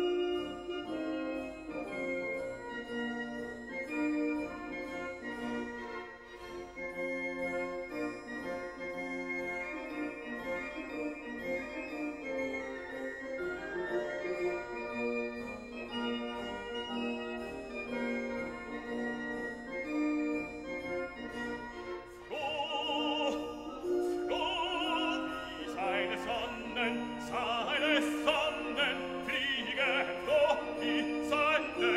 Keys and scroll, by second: 23.8 ctrl+t, 27.6 Return.